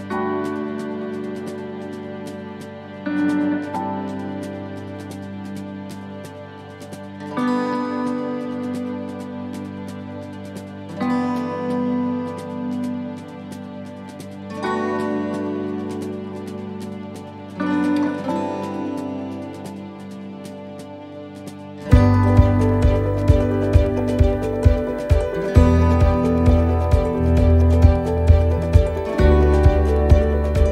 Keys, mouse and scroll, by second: 0.5 l, 0.6 l, 1.9 l, 3.1 click, 4.6 middle click, 5.7 click, 7.6 right click, 8.5 l, 8.8 l, 9.6 click, 12.6 right click, 13.7 l, 14.0 l, 14.7 click, 18.2 click, 21.7 middle click, 22.6-23.2 scroll up 2, 23.2 middle click, 24.0-24.4 scroll down 1, 24.7 scroll down 1, 25.9 click, 28.0 middle click, 28.5 middle click, 29.4 middle click, 29.9 scroll up 2, 30.3 middle click.